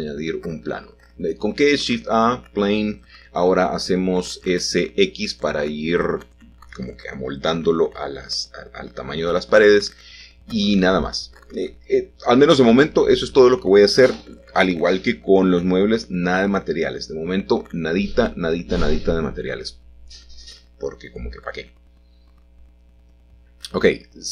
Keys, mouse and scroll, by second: 1.9-3.0 drag, 3.6 s, 3.8 x, 4.5-5.7 drag, 5.7 middle click, 6.0 scroll down 1, 6.0-6.8 scroll up 1, 6.8-7.4 scroll down 1, 7.4 shift+middle click, 7.6-8.6 scroll up 1, 8.6-9.0 scroll up 1, 11.2-12.2 drag, 13.3 i, 15.8 i, 17.8-19.2 scroll down 1, 20.5 shift+d, 21.0 Escape, 22.2 g.